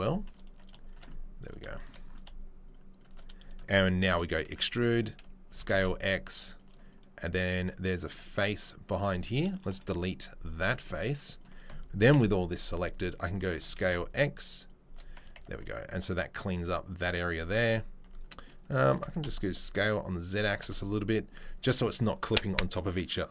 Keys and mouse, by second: 0.0 3, 0.2 click, 0.8 shift+click, 2.7 click, 4.1 e, 4.7 x, 5.5 s, 6.8-8.6 drag, 11.3 right click, 11.7-23.3 ctrl+middle drag, 12.1 ctrl+l, 13.6 s, 15.4 Tab, 18.0 Tab, 18.8 s, 20.6 Tab.